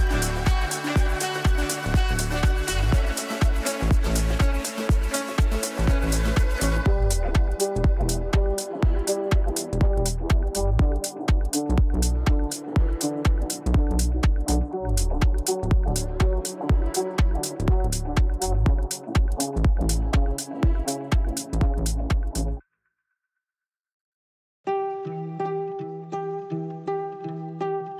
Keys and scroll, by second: 3.9 g, 17.8 g, 20.6 ctrl+z, 25.0 g.